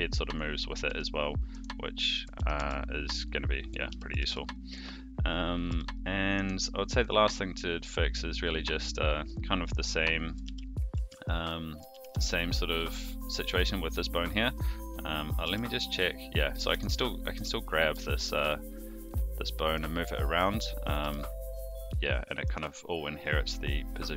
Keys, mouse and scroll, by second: 0.8 r, 2.3 alt+g, 2.5 alt+r, 3.2 click, 3.9 alt+g, 4.2 alt+r, 5.6 click, 5.7 g, 6.9 click, 7.3-7.9 middle drag, 9.2 middle click, 10.2 click, 10.4 alt+g, 10.9 alt+r, 11.9 alt+g, 12.1 alt+r, 12.4 click, 12.9 click, 14.3 click, 15.3 click, 15.4 g, 17.0 middle click, 17.9 g, 20.0-20.3 middle drag, 20.8 click, 21.0 g.